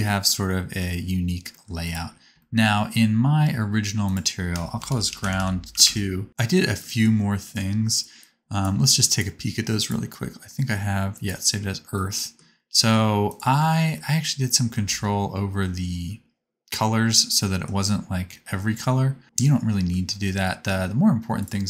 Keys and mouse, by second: 1.8 click, 4.1-13.4 drag, 13.5 x, 14.8 ctrl+z, 21.4-21.6 drag.